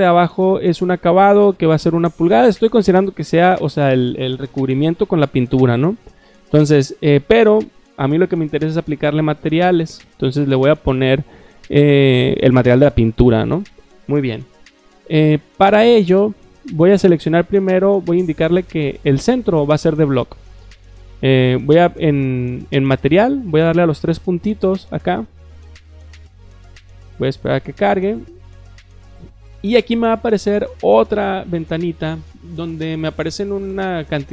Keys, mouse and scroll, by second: 19.4 click, 24.5 click, 29.7-30.3 drag, 33.7-34.3 scroll down 5.